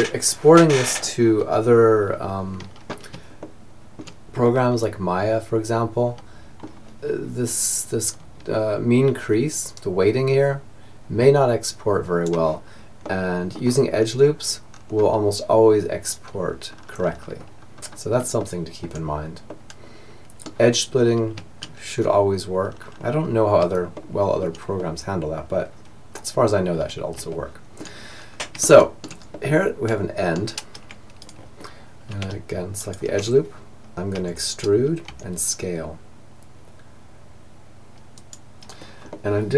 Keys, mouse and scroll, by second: 2.4-5.1 middle drag, 8.7-10.6 drag, 12.0-20.2 middle drag, 20.7 middle click, 21.7-25.5 middle drag, 26.3-30.2 middle drag, 30.4-33.6 right drag, 33.2 e, 38.2-39.5 middle drag.